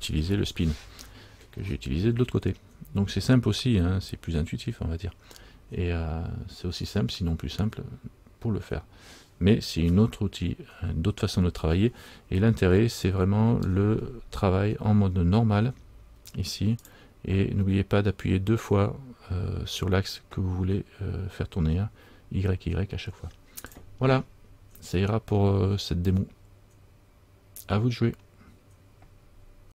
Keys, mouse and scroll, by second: 17.0 click, 23.8 click.